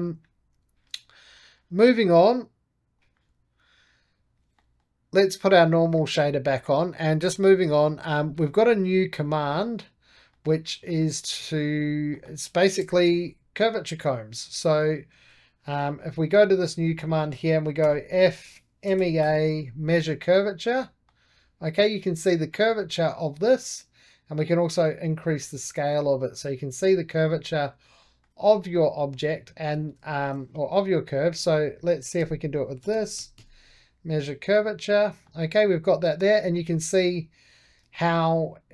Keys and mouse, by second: 2.9-4.5 drag, 4.5 middle click, 5.3 click, 5.7-8.9 middle drag, 9.4 2, 10.2-11.6 middle drag, 11.6 click, 12.0 middle click, 12.7 KP_1, 13.5-15.5 drag, 15.5 right click, 15.9 2, 16.2 click, 16.7 middle click, 17.7-19.6 typing, 20.0 click, 20.7-25.2 middle drag, 25.3-27.8 drag, 27.9 shift+middle click, 28.5 middle click, 28.8-29.9 right drag, 29.9 click, 30.0 shift+middle click, 30.6 2, 31.0 click, 31.3 middle click, 32.1-33.8 typing, 34.4 click, 35.1-38.7 middle drag.